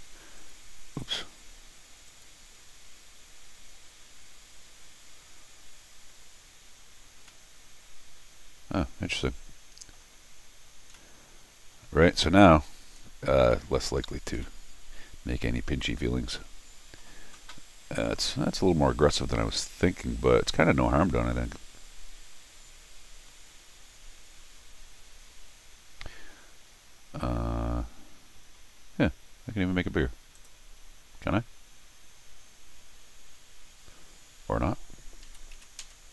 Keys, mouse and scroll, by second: 0.4 click, 0.9 click, 2.1 click, 3.8 scroll down 2, 7.2-9.9 middle drag, 10.5 middle click, 10.9-12.0 middle drag, 13.5 middle click, 14.0 scroll up 1, 14.4-17.0 middle drag, 30.3 click.